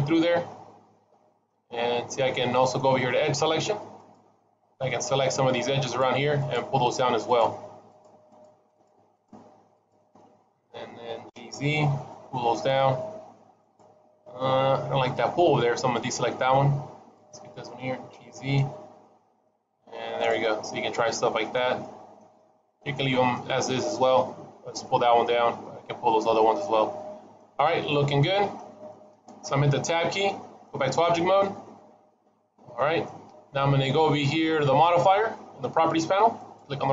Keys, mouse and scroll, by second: 0.0 middle click, 1.6-2.2 scroll up 2, 2.2 middle click, 4.0 click, 4.8 middle click, 5.7 click, 6.3 shift+click, 7.2 click, 8.2 click, 8.6 shift+click, 9.0 shift+click, 9.6 shift+click, 10.0 middle click, 11.2 g, 14.7 ctrl+z, 15.8 shift+click, 17.0 shift+click, 18.0 g, 20.3 middle click, 21.4-21.7 scroll up 2, 21.7 middle click, 22.2 shift+middle click, 22.9 middle click, 24.8 middle click, 25.7-26.4 scroll down 3, 26.4 middle click, 26.4 scroll down 1, 27.7 middle click, 28.8 shift+middle click, 30.8 Tab, 31.3 middle click, 36.2 click.